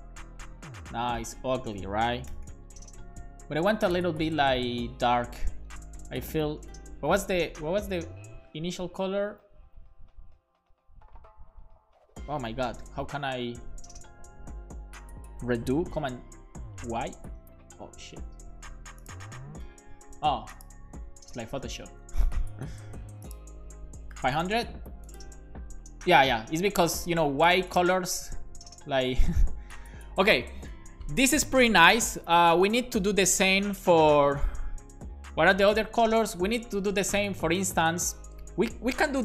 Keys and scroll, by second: 2.3 BackSpace, 2.5 super+s, 7.7 super+z, 17.1 super+y, 21.5 super+s, 24.2 BackSpace, 24.5 super+s.